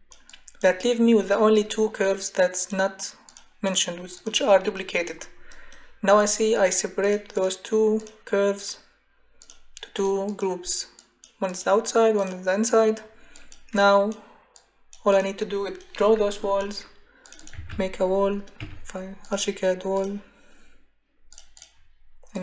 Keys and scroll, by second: 17.3-18.2 typing, 18.6 Escape.